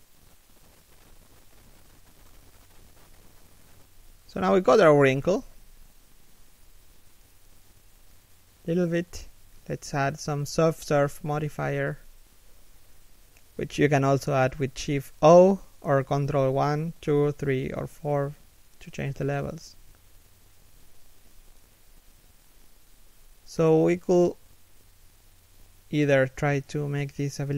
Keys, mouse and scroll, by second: 0.3 KP_3, 0.7 z, 1.0 KP_1, 1.4 z, 2.7 middle click, 3.8 scroll down 1, 4.1 middle click, 5.1 middle click, 5.4 KP_3, 5.9 KP_1, 7.1 scroll up 1, 7.9 scroll down 1, 20.2-20.5 scroll up 1, 20.8 middle click, 21.8 3, 22.4 KP_1, 22.6 z, 24.1 b, 24.5 a, 25.0 b.